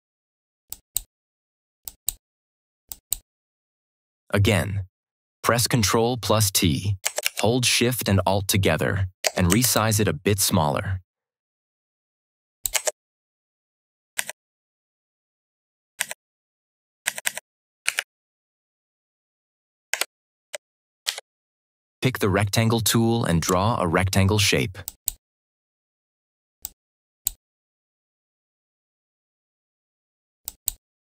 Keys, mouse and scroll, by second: 6.9 click, 7.1 ctrl+t, 9.6-12.8 alt+shift+drag, 14.1 Left, 17.7 Right, 19.8 Return, 20.9 ctrl+=, 23.3 right click, 24.7-27.4 drag, 30.3 click.